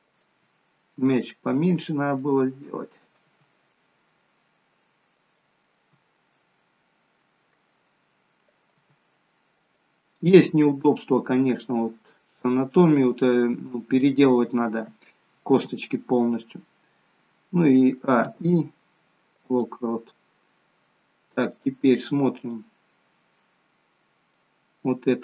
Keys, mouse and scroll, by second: 1.0 g, 2.2 middle click, 3.3 g, 5.8 middle click, 10.1 middle click, 11.6 middle click, 12.7-13.3 scroll down 1, 14.5-15.0 scroll down 1, 18.1 a, 18.4 i, 21.7 click, 24.4 middle click.